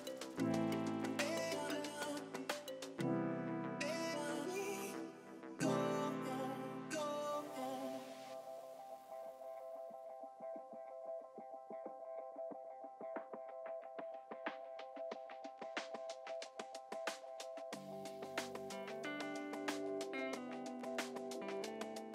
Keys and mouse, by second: 0.0 click, 2.5 click, 4.5 click, 6.1 click, 6.2-7.1 typing, 10.5 Pause, 11.3 click, 11.8 Delete, 13.7 click, 16.0 ctrl+shift+x, 16.2 click, 21.4 click.